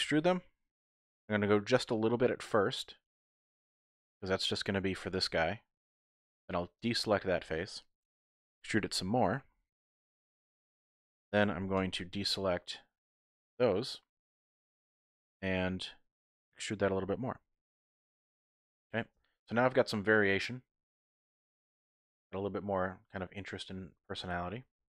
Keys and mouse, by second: 3.9 click, 6.6-8.2 typing, 10.4-11.8 typing, 10.5 click, 13.3 click, 15.0 e, 18.4 click, 18.7 middle click, 19.1 Tab, 19.5-23.0 drag, 23.8 Tab, 24.2 Tab.